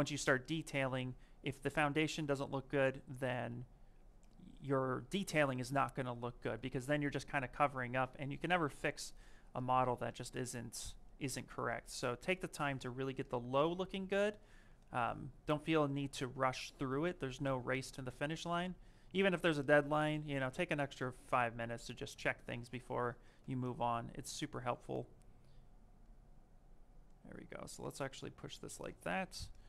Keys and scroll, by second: 23.9 s.